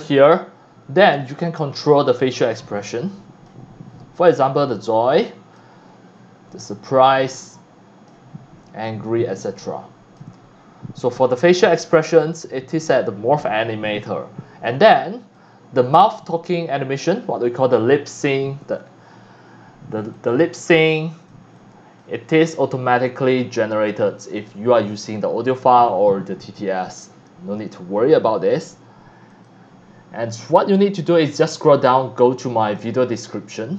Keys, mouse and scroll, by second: 0.4 scroll up 1, 1.1 scroll down 1, 2.2-3.4 drag, 4.3-5.6 drag, 6.7-8.1 drag, 8.8-10.2 drag, 11.6 click, 13.8 scroll down 1, 14.7 c, 14.8-15.4 drag, 15.5 scroll up 3, 15.8 scroll down 1, 20.1 c, 20.1-21.3 drag, 21.4 x, 21.5-22.0 drag, 29.3 click, 32.6 click.